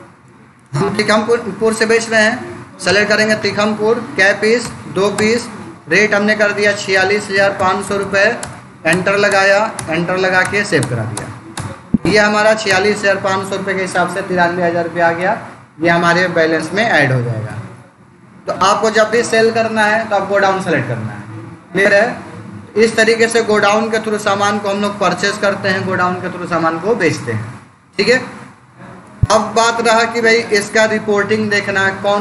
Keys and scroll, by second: 2.7 Return, 4.5 2, 5.0 Return, 6.8 4, 8.3 Return, 17.3 Page_Up, 24.4 Return, 29.2 ctrl+a.